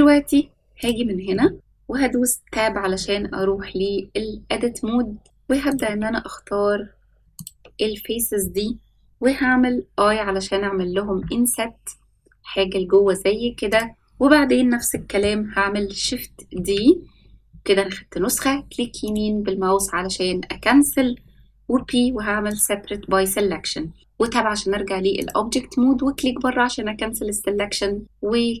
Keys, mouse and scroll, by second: 0.3-0.8 scroll up 1, 0.8 click, 1.4 shift+middle click, 2.4 Tab, 2.8-3.2 scroll down 2, 3.5 scroll down 1, 4.5-5.2 scroll up 2, 5.2 ctrl+z, 5.2 shift+middle click, 5.6 shift+click, 7.3 shift+click, 9.8 i, 12.3 s, 14.9 middle click, 16.5 shift+d, 24.0 Tab, 25.1 click, 28.5 click.